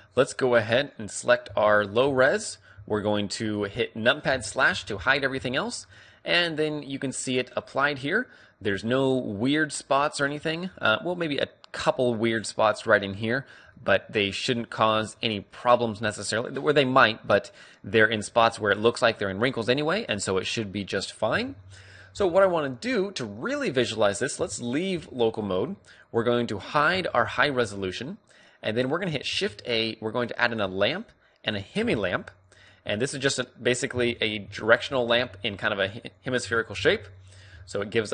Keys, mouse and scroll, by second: 0.5 s, 1.1-5.0 right drag, 2.3 z, 2.9 z, 3.6 z, 5.2 KP_Divide, 5.5 z, 6.6-8.7 middle drag, 8.9-13.5 middle drag, 13.5-14.1 scroll up 1, 14.1-14.5 scroll down 1, 14.5-16.2 middle drag, 16.2 scroll up 1, 16.3-20.5 middle drag, 20.7 KP_3, 22.2 KP_5, 23.2 click, 23.7-25.4 middle drag, 25.2 KP_Divide, 26.4-28.7 drag, 27.7 h, 28.1 z, 28.7-30.9 middle drag, 30.1 shift+a, 32.7 g, 33.4-35.0 drag, 33.6 KP_3, 34.7 KP_3, 35.1 click, 35.2 KP_5, 35.9 g, 36.9-38.1 right drag, 37.3 alt+g.